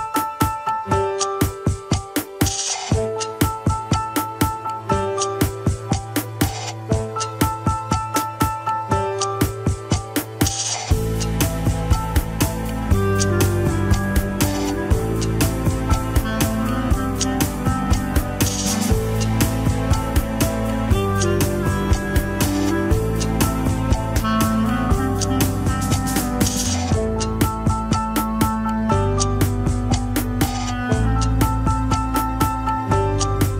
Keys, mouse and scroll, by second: 0.8 KP_1, 1.2 alt+z, 1.5 click, 1.8 alt+z, 2.7 click, 2.8-4.2 drag, 4.2-4.6 scroll up 3, 4.6 g, 5.7 shift+middle click, 5.9-6.2 scroll up 2, 6.2 g, 7.7 scroll down 4, 7.9 alt+z, 8.3 click, 8.6 alt+z, 9.6 click, 10.0 g, 11.3 click, 11.5 scroll up 2, 11.8 g, 12.4 alt+z, 12.9-17.1 typing, 13.5 click, 14.1 alt+z, 15.2 alt+z, 16.1 click, 16.9 alt+z, 17.8 alt+z, 18.3 click, 18.5 g, 19.3 KP_1, 19.5 scroll down 2, 19.7 alt+z, 20.0 scroll up 3, 20.4 KP_3, 20.7 g, 21.6 alt+z, 21.8-22.2 scroll down 2, 23.0 click, 23.2 g, 24.2 KP_1, 24.5 alt+z, 25.5 alt+z, 25.7 click, 25.9 alt+z, 26.1 KP_3, 26.4 scroll up 1, 26.5 alt+z, 26.7 g, 27.3 KP_1, 27.6 alt+z, 28.0 alt+z, 29.2 click, 30.0 shift+click, 30.8 click, 31.2 KP_3, 31.5 alt+z, 31.9 click, 32.6 KP_1, 32.6-33.2 scroll down 2, 32.9 alt+z.